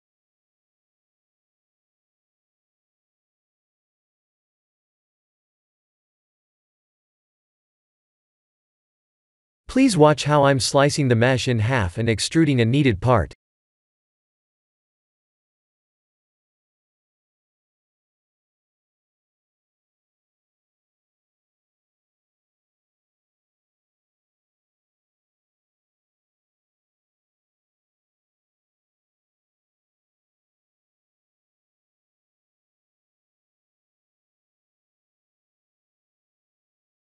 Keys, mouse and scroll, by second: 0.1 click, 1.4 Tab, 2.0 click, 2.2 b, 3.5 g, 6.6 middle click, 7.2 middle click, 7.4 middle click, 7.7 middle click, 8.7 click, 9.0 3, 9.3 click, 10.1 middle click, 11.0 ctrl+r, 13.7-17.2 typing, 15.7 click, 19.6 x, 20.9 middle click, 23.4 3, 23.8 click, 25.5 click, 26.7 KP_1, 27.6 KP_3, 28.7 e, 34.4 e.